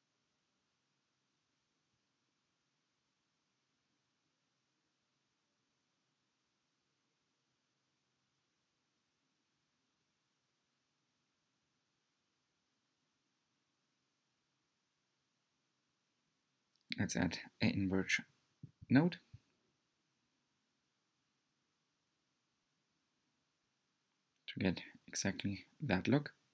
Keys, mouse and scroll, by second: 4.4-7.7 drag, 8.7-13.3 middle drag, 13.3 click, 13.9 scroll down 2, 14.5 click, 15.6 click, 24.3-26.5 middle drag.